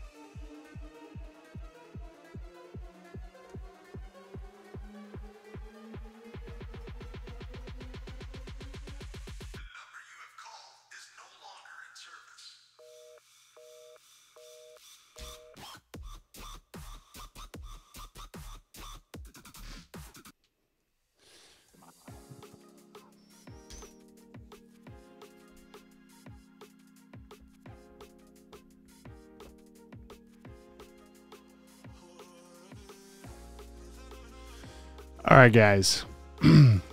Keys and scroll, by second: 0.7 super+s, 3.6 super+t, 15.2 Return, 15.4 v, 16.2 super+z, 16.7 v, 21.8 super+t, 23.8 v, 24.3 super+s, 34.1 super+s.